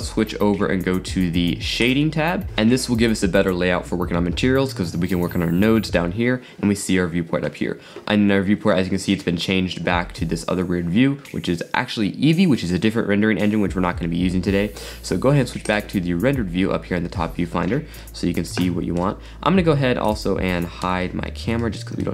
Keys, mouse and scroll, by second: 2.4 click, 8.7 scroll down 2, 15.7 click, 18.0-19.2 middle drag, 19.2 middle click, 19.3-20.1 scroll down 5, 20.1 click, 20.8 h, 21.6-22.0 scroll up 4, 22.0-22.1 middle drag.